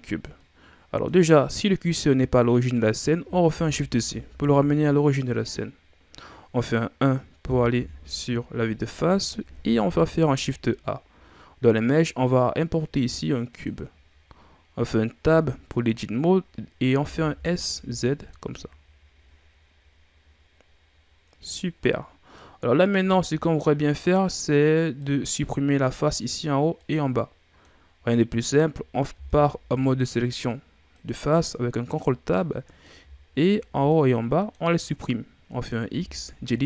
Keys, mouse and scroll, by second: 0.3 scroll up 1, 0.4-3.4 middle drag, 3.5 shift+c, 7.8 KP_1, 9.9 shift+a, 15.3 Tab, 17.0 s, 21.9 middle click, 22.5-23.1 scroll up 2, 23.1-25.0 scroll down 1, 25.0 middle click, 26.0 right click, 26.8-28.0 middle drag, 28.0-29.2 scroll up 1, 29.2 ctrl+Tab, 31.9 right click, 32.4 middle click, 33.3 shift+right click, 33.9-35.9 middle drag, 35.9 x.